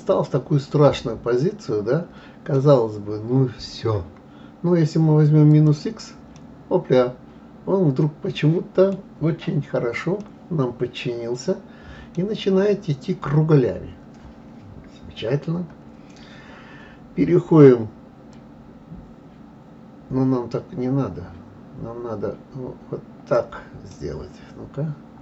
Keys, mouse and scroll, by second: 5.5 click, 6.3-9.3 middle drag, 9.3-10.0 scroll up 4, 10.2-12.2 middle drag, 12.2-12.8 scroll down 4, 12.8-13.3 scroll up 1, 13.3-16.2 scroll down 1, 18.3-21.3 drag, 23.9-25.2 middle drag.